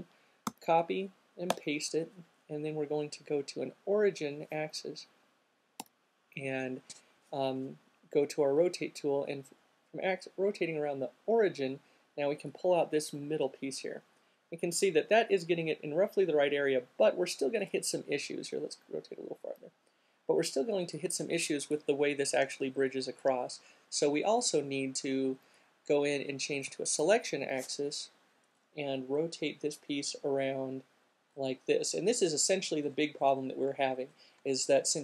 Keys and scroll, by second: 0.7 c, 1.6 v, 6.1 e, 25.3 alt+q, 27.7 alt+e.